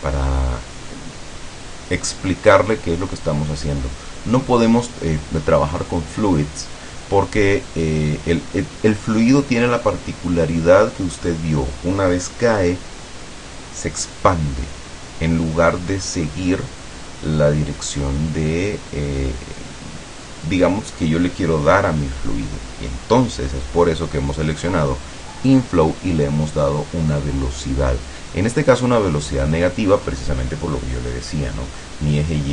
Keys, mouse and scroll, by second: 30.7-32.1 middle drag.